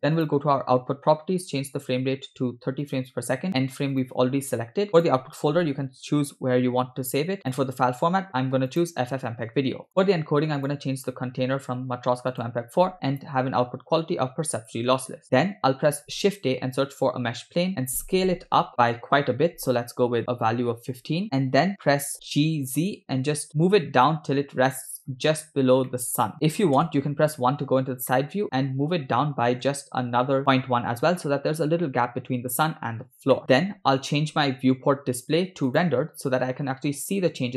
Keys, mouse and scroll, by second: 0.3 click, 1.7-3.0 drag, 3.5 click, 4.9 scroll down 3, 5.0-6.2 drag, 6.0 /, 7.5-8.9 drag, 9.5 scroll down 3, 10.0 scroll down 1, 10.6-12.6 drag, 13.2-14.8 drag, 15.3-15.7 scroll down 3, 15.9 shift+a, 17.8 s, 22.1 scroll up 1, 22.5 g, 25.4 scroll up 3, 25.9-26.4 shift+middle drag, 26.4 scroll down 1, 26.8 KP_1, 28.2 shift+middle drag, 28.6 scroll up 2, 29.8 g, 33.0 scroll down 2, 33.5 shift+middle click, 35.9 click, 37.4 scroll up 1.